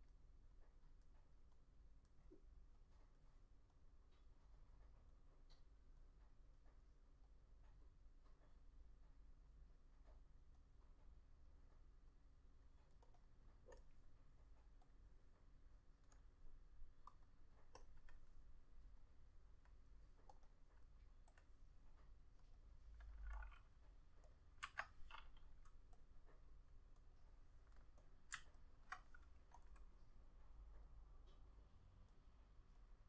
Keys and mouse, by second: 13.3 double click, 20.6 double click, 24.8 F6, 27.3 double click, 28.7 alt+click.